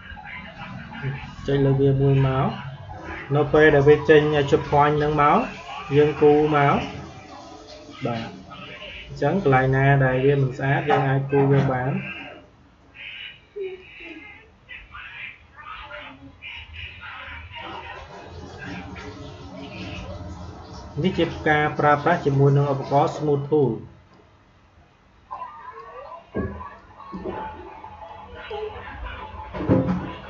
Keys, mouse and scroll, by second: 1.3 click, 6.1-9.9 drag, 10.3-13.7 drag, 16.6-30.2 drag.